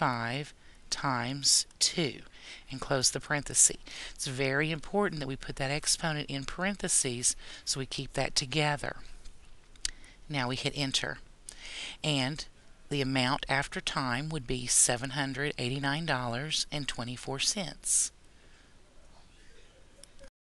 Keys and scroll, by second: 0.1 5, 1.0 *, 2.0 2, 10.2 Return.